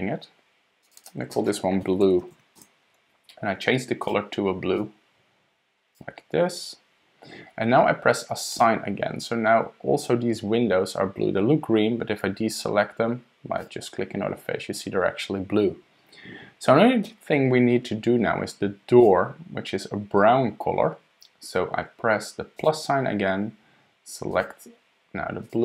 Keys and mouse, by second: 0.8 click, 1.0 click, 1.9-3.4 drag, 4.0 click, 8.5 click, 13.6 click, 19.0 click, 22.7-25.6 drag.